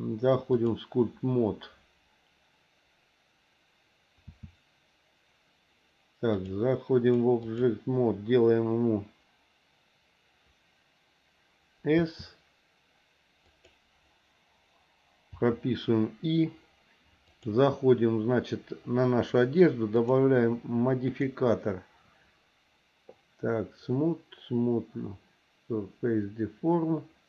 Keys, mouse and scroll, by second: 4.2 s, 6.3-7.7 drag, 11.9 s, 15.4 i, 17.3 click, 20.0 click, 21.1-27.2 drag.